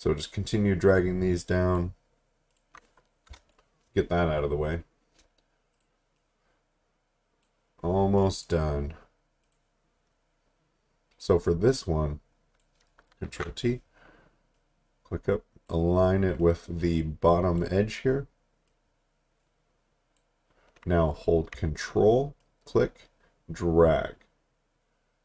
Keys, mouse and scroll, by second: 3.3 Return, 4.8-5.7 scroll down 1, 5.7 click, 8.3 right click, 9.4 click, 13.3 ctrl+t, 14.5 click, 22.4 ctrl+click.